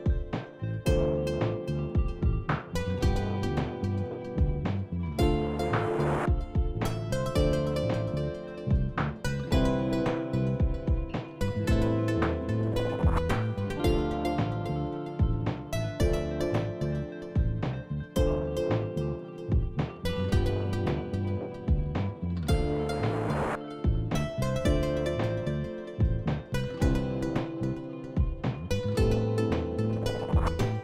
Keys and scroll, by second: 4.3-7.1 typing, 14.8 BackSpace, 20.3 w, 21.0-22.4 w, 23.4 Down, 23.4 Down, 30.3-30.8 typing.